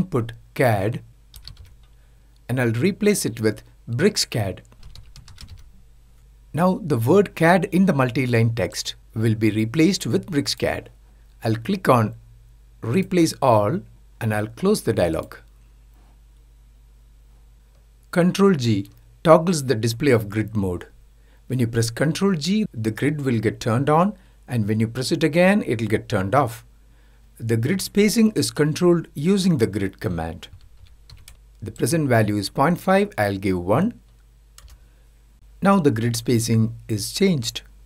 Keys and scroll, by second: 18.3 ctrl+g.